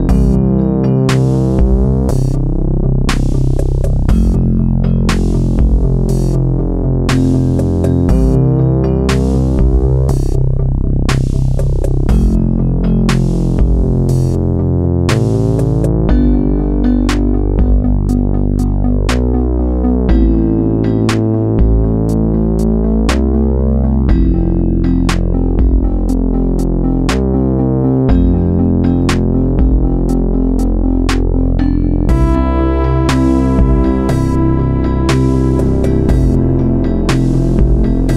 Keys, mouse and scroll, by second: 3.8 x, 6.9 KP_7, 7.8 KP_5, 10.7 click, 21.2 a, 22.8 shift+d, 25.5 click, 30.6 shift+d, 33.2 click, 37.4-38.1 middle drag.